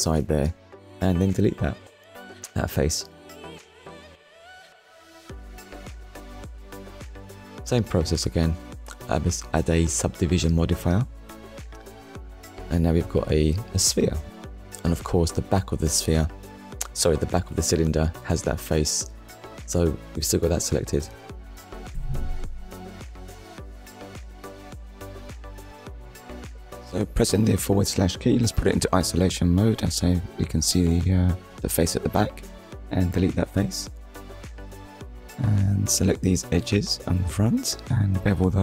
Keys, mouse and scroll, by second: 0.1 click, 0.8 middle click, 4.0 right click, 5.5 click, 7.4 click, 9.3 click, 11.0 click, 12.5 shift+middle click, 14.9 click, 15.9 Tab, 18.0 click, 22.2 click, 25.7 scroll down 1, 27.1 click, 28.3 Delete, 29.2 click, 30.8 middle click, 33.2 click, 33.9 alt+click, 34.7 middle click, 36.0 click, 37.1 click.